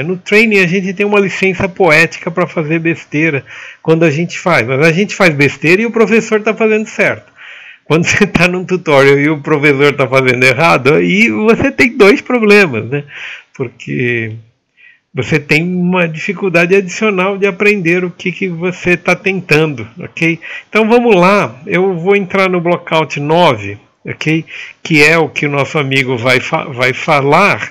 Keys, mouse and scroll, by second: 27.2-27.7 typing.